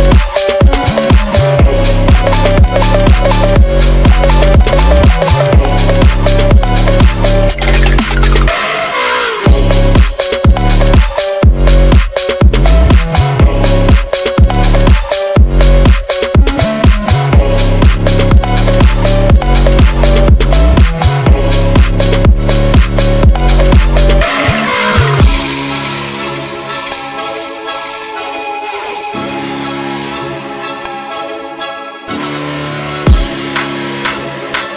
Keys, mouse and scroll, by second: 0.6 click, 0.7 click, 1.2 Tab, 1.3 s, 2.0 click, 2.3 Tab, 2.8 click, 3.4 click, 3.5 click, 3.8 s, 4.2 click, 5.0 alt+click, 5.4 ctrl+b, 6.0 click, 7.5 click, 7.9 e, 8.7 2, 8.9 click, 9.4 3, 9.5 click, 10.0 shift+click, 10.6 shift+click, 11.2 shift+click, 11.5 shift+click, 12.0 shift+click, 12.9 p, 13.2 click, 13.4 Tab, 13.8 Tab, 14.0 a, 14.4 click, 15.0 click, 15.4 e, 16.1 click, 16.4 g, 16.9 click, 17.6 ctrl+z, 17.9 g, 18.4 ctrl+z, 18.9 shift+click, 19.6 shift+click, 19.8 e, 20.6 click, 20.9 shift+click, 21.1 shift+click, 21.8 e, 22.6 click, 22.9 shift+click, 23.1 e, 23.3 click, 23.8 Tab, 24.2 click, 24.7 shift+click, 25.2 g, 25.9 click, 26.7 click, 27.4 ctrl+r, 28.0 click, 28.5 shift+click, 28.7 shift+click, 29.6 shift+click, 30.1 shift+d, 31.3 click, 32.0 alt+e, 32.9 click, 33.7 drag, 34.0 g, 34.5 click.